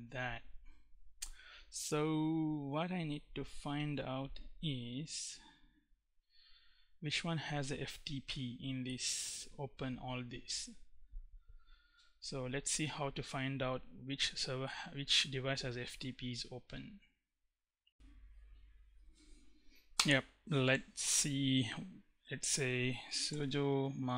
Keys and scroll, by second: 22.1-24.1 typing.